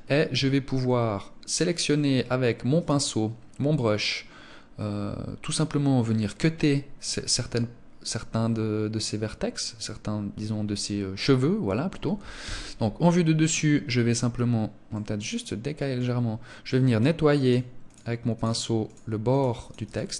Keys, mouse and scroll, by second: 2.0 click, 11.7 KP_1, 14.2 middle click, 16.0 click, 16.7 click, 17.6 click, 18.2 click, 18.9 click, 19.2 click, 19.9 click.